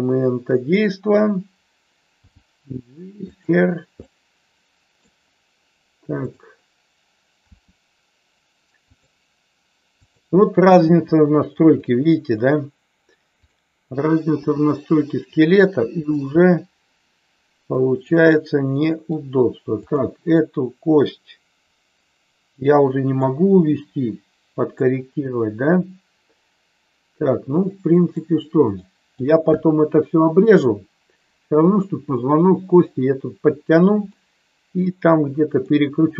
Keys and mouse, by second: 2.1 g, 3.3 click, 4.1-5.0 middle drag, 6.1 click, 7.5 r, 8.9 click, 10.0 click, 10.8 r, 14.3 r, 16.0 click, 16.4-19.0 middle drag, 19.8 click, 22.6 middle click, 24.8-28.1 middle drag, 28.8 middle click, 34.0-35.6 middle drag.